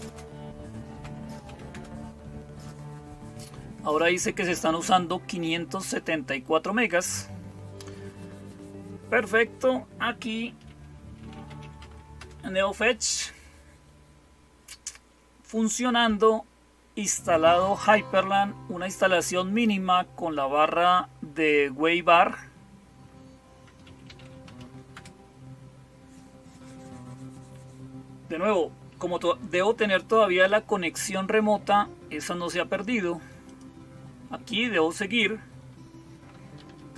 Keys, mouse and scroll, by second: 0.0-36.9 typing, 33.3 click, 34.4 click.